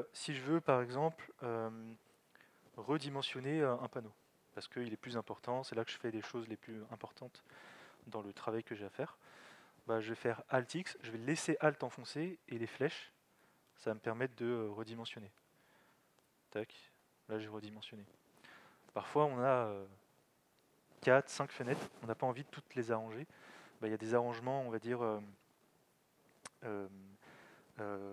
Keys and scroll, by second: 10.7 alt+x, 13.7 alt+Down, 15.3 alt+x, 15.4 Right, 16.1 alt+x, 16.6 alt+Up.